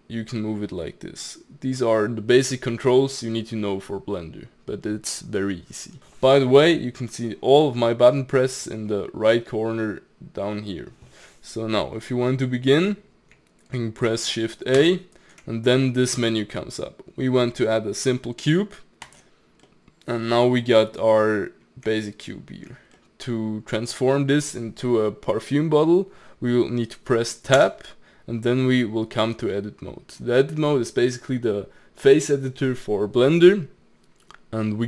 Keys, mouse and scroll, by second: 7.6-10.6 middle drag, 12.6 middle click, 14.8 shift+a, 19.7-21.2 middle drag, 21.2-22.0 scroll up 3, 22.0-26.1 shift+middle drag, 27.2 middle click, 27.6 Tab.